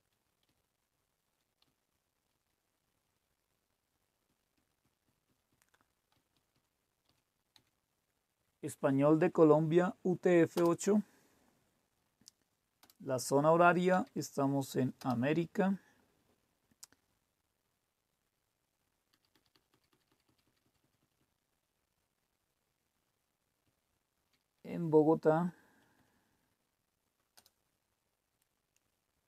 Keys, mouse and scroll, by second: 0.4-1.3 Up, 1.6-2.8 typing, 4.2 typing, 4.5 Down, 5.0-5.4 Down, 6.1 Up, 6.3 Up, 6.5-7.0 typing, 7.5 Down, 10.6 Return, 12.8 Return, 13.8 Down, 14.9 Return, 19.2 Down, 19.2 Down, 19.5 Down, 19.6 Down, 19.8 Down, 20.2 Down, 20.4 Down, 20.6 Down, 20.8 Down, 20.9 Down, 21.1-23.0 Down, 23.6 Down, 24.2 Down, 24.3 Down, 24.6 Up, 25.2 Up, 25.3 Up, 25.9 Up, 27.3 Return.